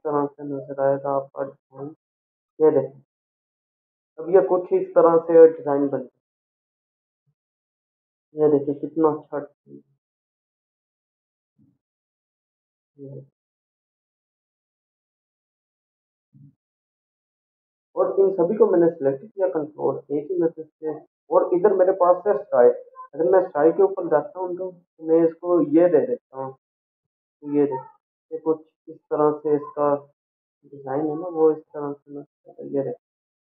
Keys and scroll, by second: 18.0 ctrl+0, 20.1 ctrl+a.